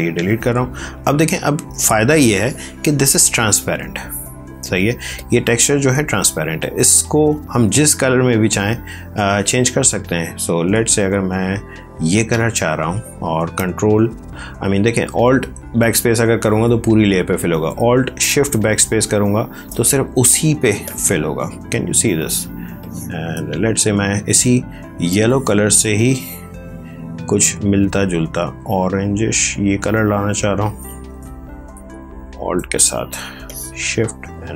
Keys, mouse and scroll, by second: 1.5 v, 2.2 click, 5.0 click, 8.7 click, 15.3 alt+BackSpace, 16.3 ctrl+z, 18.5 alt+shift+BackSpace, 20.1 ctrl+space, 20.7 ctrl+click, 20.9 ctrl+space, 21.8 space, 22.7 click, 22.8 space, 25.0 click, 31.6 alt+shift+BackSpace, 33.3 ctrl+click, 33.5 ctrl+space.